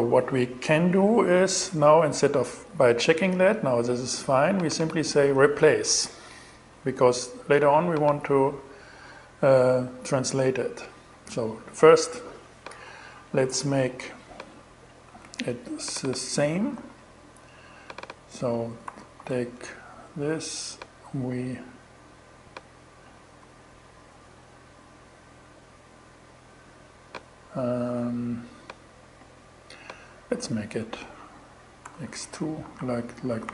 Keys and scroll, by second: 14.7 super+c, 16.2 super+v, 18.3 BackSpace, 22.9 BackSpace, 31.3 x, 31.7 2, 32.1 Right, 32.9 Left, 33.4 shift+Left.